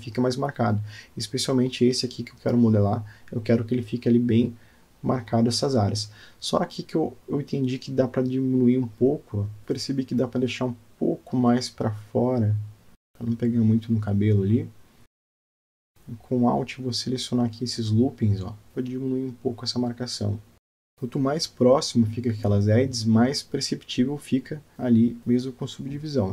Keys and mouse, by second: 5.2 Tab, 6.4 shift+middle click, 7.4-8.4 middle drag, 8.6 middle click, 8.8 middle click, 11.0 click, 11.3 Tab, 12.0 click, 12.9 click, 13.1 g, 15.1 click, 15.5 g, 15.9 alt+Tab, 16.3 alt+click, 17.7 alt+click, 20.8 Tab, 20.9-22.7 middle drag, 22.8 Tab, 23.5 click, 24.2-25.3 middle drag.